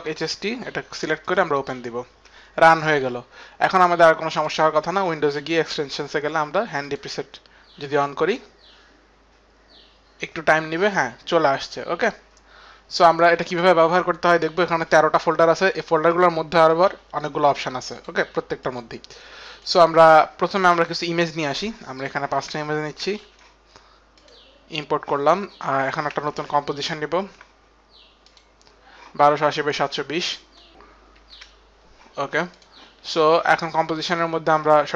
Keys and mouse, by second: 1.2 click, 2.4 click, 2.9 click, 4.3 click, 12.0 click, 14.5 click, 15.2 click, 16.3 click, 17.7 click, 17.9 click, 21.9 click, 23.1 shift+click, 24.2 shift+click, 26.2 shift+click, 27.1 shift+click, 28.2 click, 30.4 click, 30.5 click, 32.3 click, 33.5 click, 34.3 click, 34.7 ctrl+a, 34.7 click.